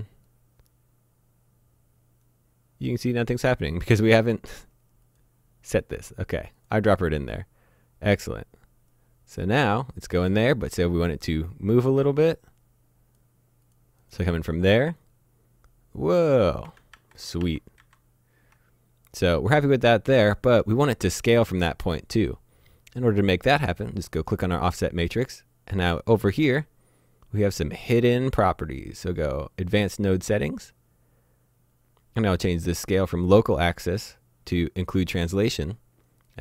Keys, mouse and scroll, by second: 6.6 click, 8.2 click, 16.9 z, 17.4 z, 17.8 z, 19.4 click, 25.9-29.4 scroll down 1, 29.6 click, 31.0-32.4 scroll down 1, 32.9 click, 34.9 click.